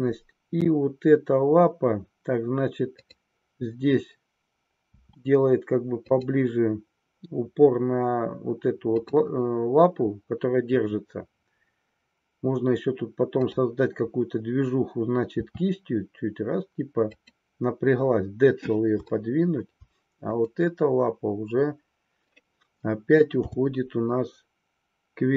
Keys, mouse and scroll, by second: 2.9-4.3 drag, 4.8 r, 6.0 click, 9.1-10.4 drag, 13.3-14.8 drag, 15.3 r, 19.2-19.7 shift+middle drag, 23.3 g.